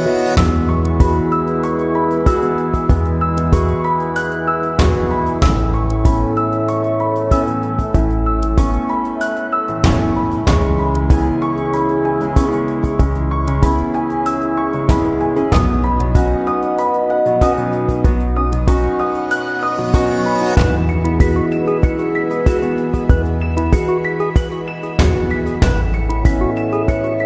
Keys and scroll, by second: 2.2 ctrl+], 4.9 ctrl+0, 24.9 ctrl+z.